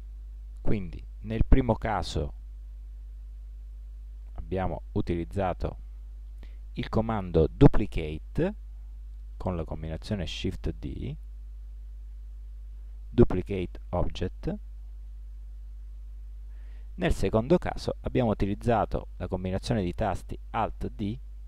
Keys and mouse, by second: 1.8-16.5 typing, 17.8 -, 18.9-19.3 -, 19.3-21.4 -.